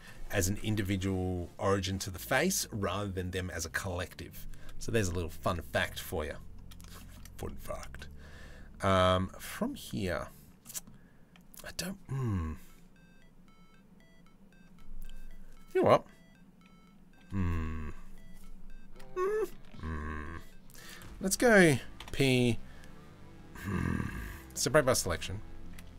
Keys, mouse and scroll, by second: 7.1 middle click, 10.3 middle click.